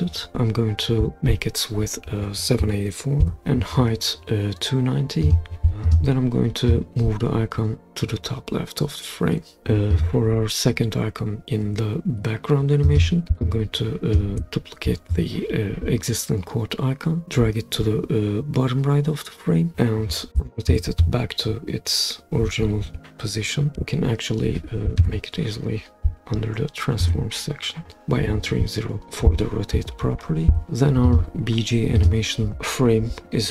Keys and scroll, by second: 3.0-3.9 typing, 19.7 super+z, 25.0 0, 27.0 Return.